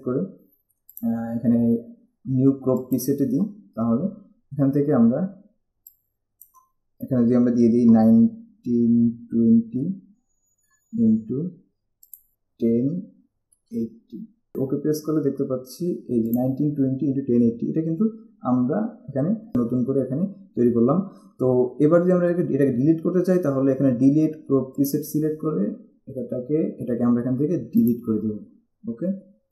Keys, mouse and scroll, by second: 1.2 click, 6.1 click, 8.2-10.0 typing, 12.3 click, 13.0 0, 13.8 8, 14.7 click, 16.5 click, 28.0 click.